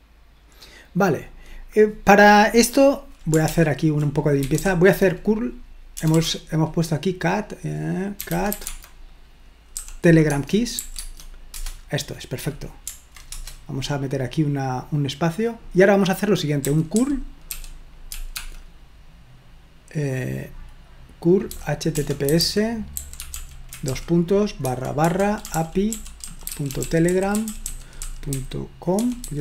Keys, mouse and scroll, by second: 0.2-0.7 scroll up 1, 1.6 click, 3.5 ctrl+l, 4.2-6.1 typing, 7.9-11.5 typing, 10.2 Tab, 10.9 Tab, 13.3 Return, 16.6-18.3 typing, 21.5-29.2 typing.